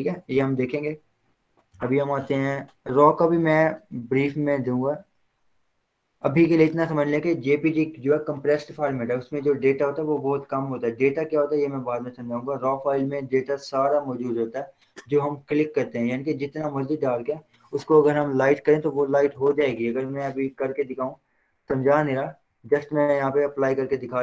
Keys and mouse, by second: 1.2 click, 1.8 v, 4.8-9.3 drag, 19.7 click, 19.8 ctrl+o, 23.5 click.